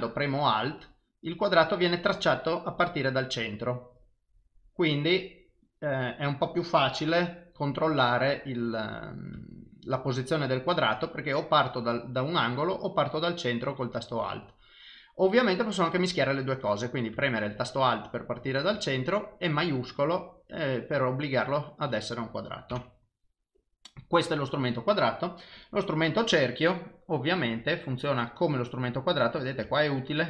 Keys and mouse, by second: 8.4 click, 16.1 click, 25.6 click, 27.3 click.